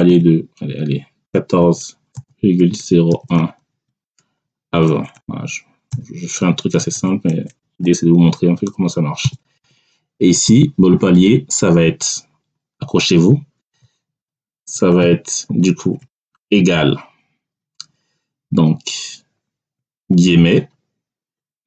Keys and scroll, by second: 0.0 1, 1.2 4, 2.0 ', 3.0 0, 3.2 1, 3.8 Tab, 5.0 2, 5.8 0, 6.7 BackSpace, 7.7 2, 9.1 0, 9.5 Tab, 13.5-16.3 typing, 19.7 3.